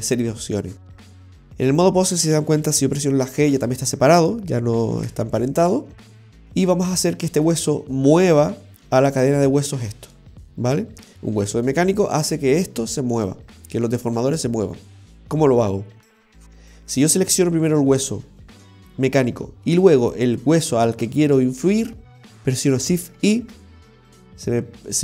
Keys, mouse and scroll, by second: 1.8 right click, 2.6 g, 5.2 ctrl+z, 16.4 shift+right click, 16.8 s, 17.1 right click, 20.0 shift+right click, 22.1 s, 23.3 shift+i.